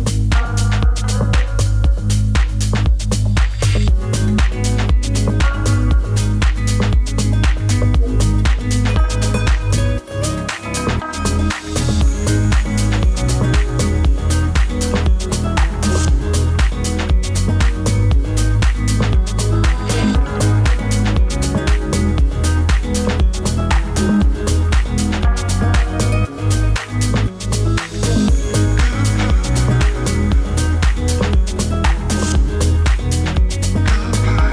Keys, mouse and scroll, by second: 0.1 click, 4.6 click, 5.4 right click, 6.1 click, 9.6 right click, 10.6 click, 14.9-31.5 drag, 29.9 0, 30.1 Return.